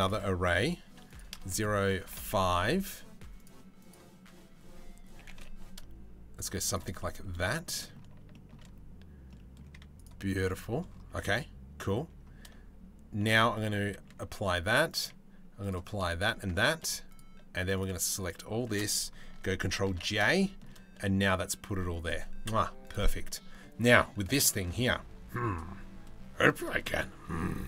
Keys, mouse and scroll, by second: 0.8 click, 1.2 click, 3.5-4.8 drag, 4.8 g, 6.6-6.9 middle drag, 7.1 shift+middle drag, 7.4 middle click, 7.9 shift+middle drag, 8.9 middle click, 9.3 z, 10.0 middle click, 13.6 ctrl+a, 14.5 click, 15.2 click, 15.8 ctrl+a, 16.1 ctrl+a, 16.7-17.4 middle drag, 17.8 middle click, 19.5 ctrl+j, 19.9 middle drag, 23.4 middle click, 24.3 middle click, 27.4 click.